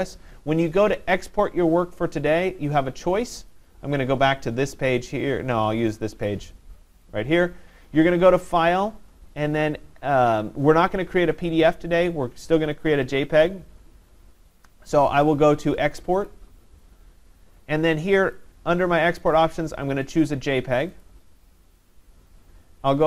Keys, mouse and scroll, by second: 3.4 click, 3.6 click, 5.9 click, 6.1 click, 8.6 click, 12.0 click, 16.3 click, 18.4 click, 19.4 click, 21.0 click.